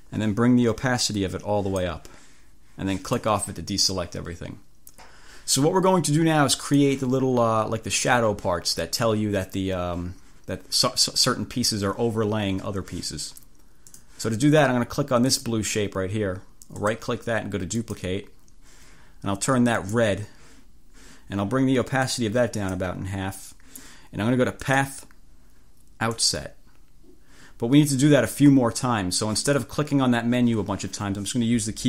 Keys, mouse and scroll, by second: 1.2 click, 3.2 click, 6.8 click, 13.9 click, 15.5 click, 16.9 right click, 17.9 click, 19.9 click, 22.1 click, 24.7 click, 26.2 click.